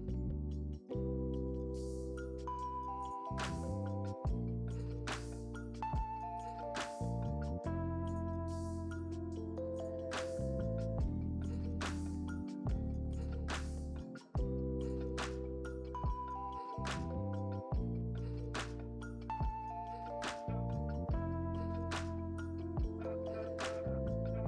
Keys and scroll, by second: 9.3 space.